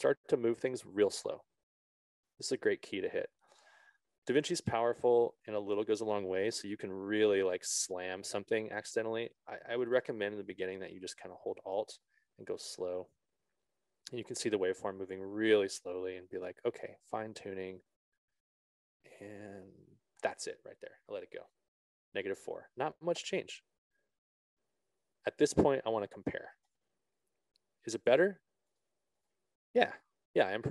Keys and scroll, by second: 10.4 ctrl+z.